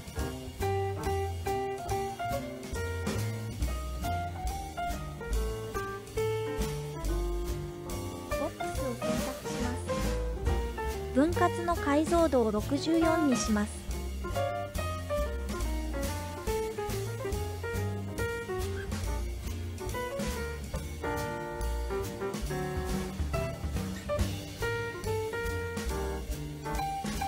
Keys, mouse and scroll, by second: 2.5 space, 4.4-7.2 drag, 8.1 click, 13.2-15.5 drag, 17.7 space, 19.2 space, 19.9-22.0 drag, 23.8-27.1 drag.